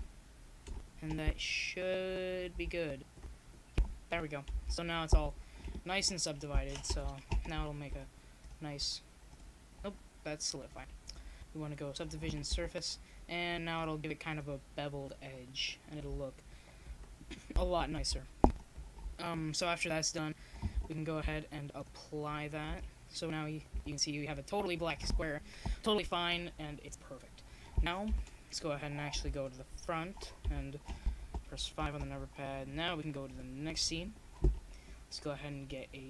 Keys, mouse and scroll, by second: 1.4 a, 2.8 ctrl+r, 6.7-8.4 middle drag, 8.4 a, 9.7-10.7 middle drag, 10.7 KP_0, 13.1 KP_0, 14.7 middle click, 15.3 middle click, 15.6 click, 17.4 click, 19.5 Tab, 25.7 KP_0, 26.8 middle click, 27.8-29.6 middle drag, 29.1 Tab, 29.6 Tab, 30.3-31.5 drag, 31.5 Tab, 31.7 click, 32.6 Tab.